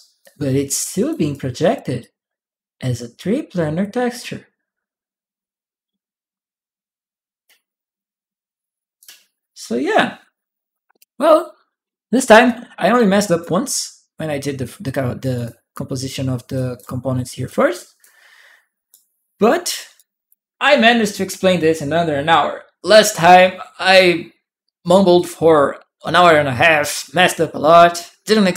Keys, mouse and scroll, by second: 0.0 click, 1.1 click, 1.1 right click, 1.8-8.8 drag, 9.8-13.2 drag, 12.3 right click, 15.1 click, 16.3 click, 16.4 right click, 17.5-18.7 right drag, 19.7 right click.